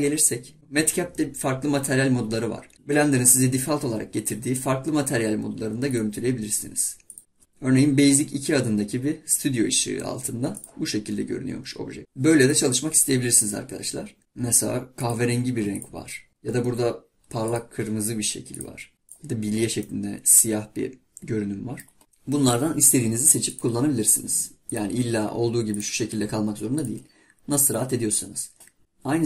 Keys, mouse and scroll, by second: 0.6-2.5 drag, 6.0 click, 7.2 click, 12.4-14.2 drag, 19.8-22.0 middle drag, 23.5-26.6 drag, 28.8-29.2 drag.